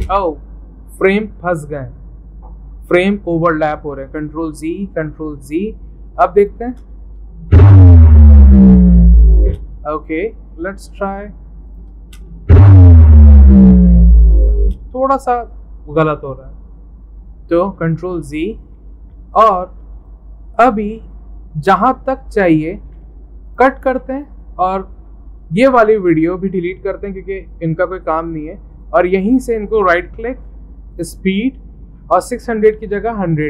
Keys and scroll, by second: 4.1 ctrl+z, 4.9 ctrl+z, 16.7 ctrl+z, 17.7 ctrl+z, 22.9-23.9 typing, 27.7 Delete, 32.9-33.4 typing.